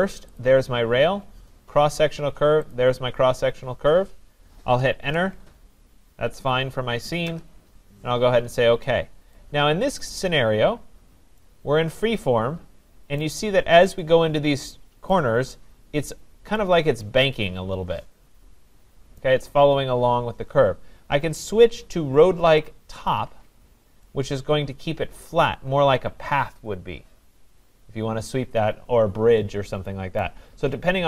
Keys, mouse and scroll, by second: 0.4 click, 2.7 click, 5.0 Return, 7.2 Return, 10.0 click, 10.8-11.3 scroll, 13.2 right click, 15.1 right click, 19.2 right click, 23.1 click, 30.2 right click.